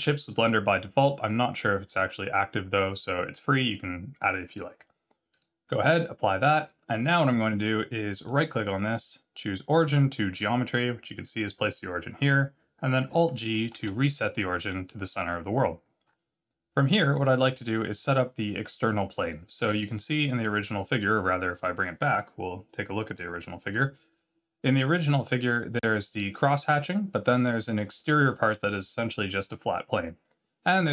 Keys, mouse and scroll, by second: 5.3 click, 8.1 right click, 13.7 alt+g, 16.0-16.8 scroll up 4, 17.1 middle click, 19.1-20.2 scroll down 2.